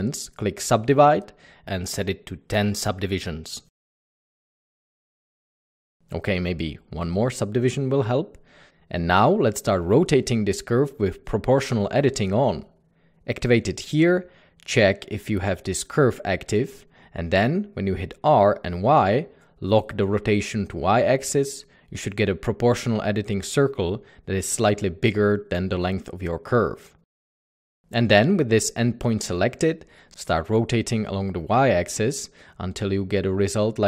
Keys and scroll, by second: 5.2 Tab, 5.5-5.9 typing, 5.6 Tab, 7.0 typing, 18.9 typing, 20.3 typing, 25.4 typing.